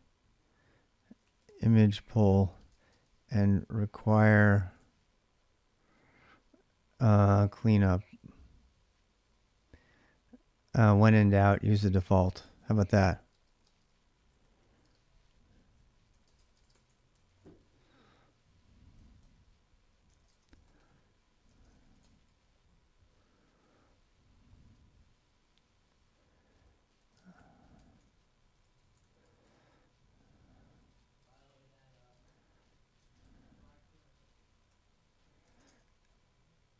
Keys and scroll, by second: 0.8-4.5 typing, 6.9-8.4 typing, 9.5 typing, 12.0-17.7 typing, 18.7-22.0 typing, 21.3 ctrl+[, 21.8 Return, 23.1-25.2 typing, 26.3-29.7 typing, 30.8-35.8 typing.